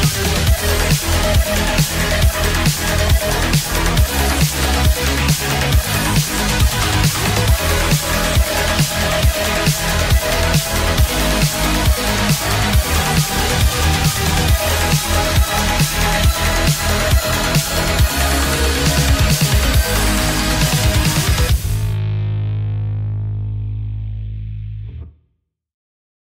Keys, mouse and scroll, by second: 0.4-1.4 z, 4.5 middle click.